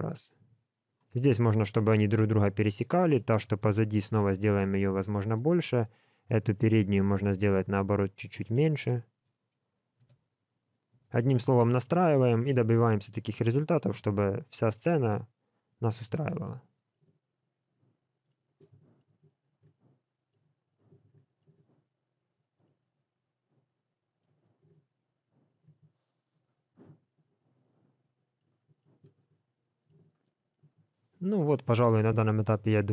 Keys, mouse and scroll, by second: 1.0 middle click, 1.7 middle click, 3.6 s, 5.3 click, 6.0 shift+click, 6.7 s, 8.7 KP_1, 9.9 g, 11.1 alt+a, 11.4 middle click, 12.1 click, 13.3 KP_1, 14.5 click, 17.0 alt+a, 17.2 middle click, 18.2 click, 18.3 middle click, 18.5 KP_1, 18.9 shift+click, 19.2 KP_7, 19.6 g, 20.3 middle click, 20.9 KP_7, 21.1 g, 21.5 alt+a, 21.6 middle click, 22.5 click, 23.0 click, 24.2 scroll down 3, 24.3 middle click, 24.7 alt+a, 24.7 middle click, 25.5 scroll up 3, 25.7 shift+middle click, 25.8 middle click, 27.7 click, 28.4 middle click, 28.7 shift+click, 29.0 KP_1, 29.3 s, 29.9 alt+a, 30.0 middle click, 30.5 scroll up 1, 30.6 shift+middle click, 30.8 middle click.